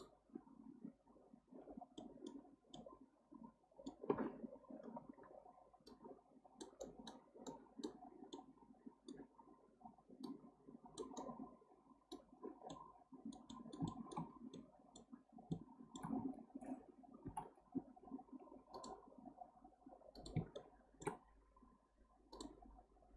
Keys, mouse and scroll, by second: 2.0-2.5 middle drag, 2.5 scroll down 1, 2.7-5.8 middle drag, 12.7-14.2 middle drag, 14.2 scroll up 1, 14.5-15.2 middle drag, 15.2 scroll up 1, 15.5-17.2 shift+middle drag, 17.2 k, 20.6-23.1 shift+middle drag.